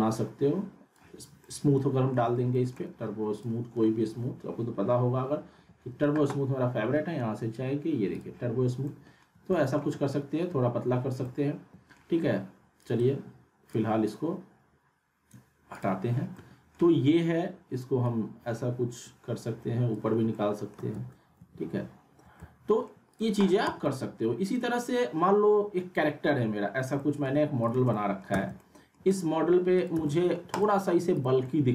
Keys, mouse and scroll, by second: 1.4-2.3 alt+middle click, 3.4 click, 4.5-6.1 typing, 8.1 click, 8.7 scroll up 1, 8.8-9.5 alt+middle drag, 12.8 right click, 13.7 click, 16.3-16.9 middle drag, 18.0-20.2 drag, 20.1 scroll down 1, 20.3-20.9 alt+middle click, 21.4 ctrl+z, 22.4-23.0 middle click, 23.1 click, 23.6 z, 23.8-24.4 alt+middle click, 24.5 click, 25.5-26.3 scroll up 1, 26.3 F4, 26.9 alt+middle click, 27.6 click, 27.9 alt+middle click, 28.3 z, 28.6-29.4 alt+middle click, 29.1 click, 29.4-29.8 scroll up 1, 29.8 click, 29.9 z, 30.1 middle click, 30.5 click, 31.4-31.7 alt+middle click.